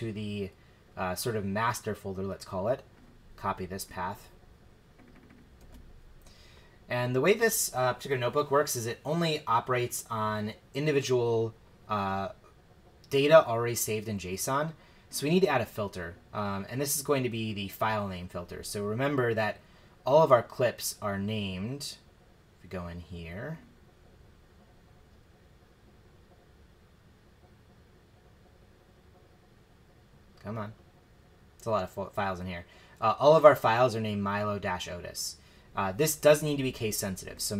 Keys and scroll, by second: 5.6 super+v.